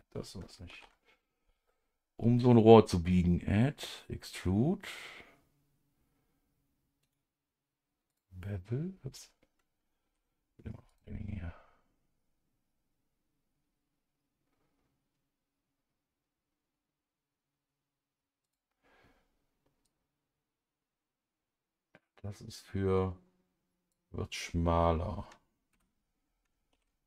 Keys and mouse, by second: 0.7 ctrl+z, 7.0 right click, 8.1 click, 10.9 click, 18.5 click, 19.8-25.4 drag, 25.7 Escape, 26.7 ctrl+z.